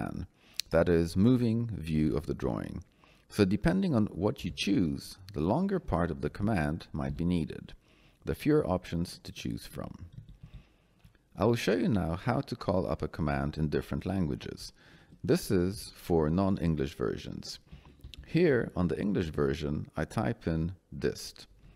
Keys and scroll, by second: 1.9 o, 2.4 l, 4.3 i, 6.2 BackSpace, 7.0 y, 10.1 Down, 14.9 Escape, 17.6 d, 18.0 i.